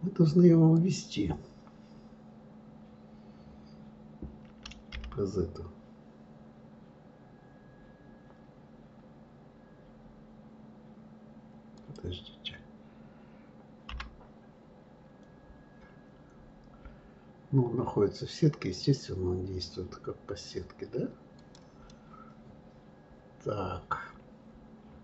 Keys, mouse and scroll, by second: 0.7 click, 21.9-25.0 middle drag.